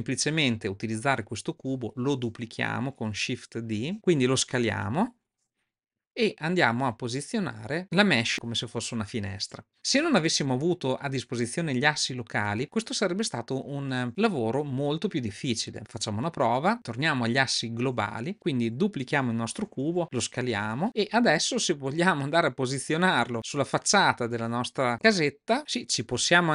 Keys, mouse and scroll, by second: 3.5 shift+d, 4.8 s, 7.0-7.8 drag, 8.9-9.7 shift+middle drag, 16.1-17.9 drag, 18.2 click, 19.6 shift+d, 21.0 scroll up 1, 21.0-25.4 middle drag, 25.9 g.